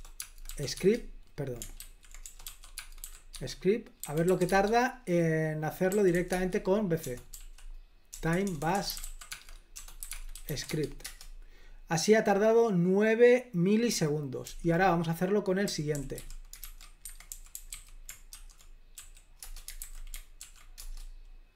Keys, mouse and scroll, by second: 0.0-0.6 typing, 0.8 Tab, 1.8 ctrl+w, 2.3-4.6 typing, 5.7-10.9 typing, 11.1 Return, 14.5 super+l, 15.5-19.8 typing, 19.9 super+h, 20.5 ctrl+p, 20.9 Return.